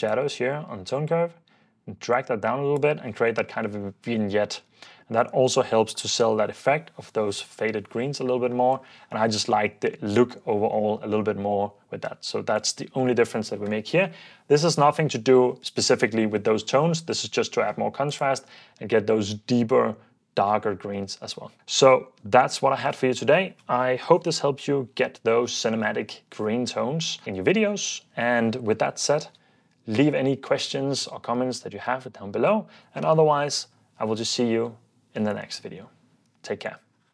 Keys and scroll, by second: 4.7 super+f, 5.2 super+d, 9.1 super+s, 11.2 super+d.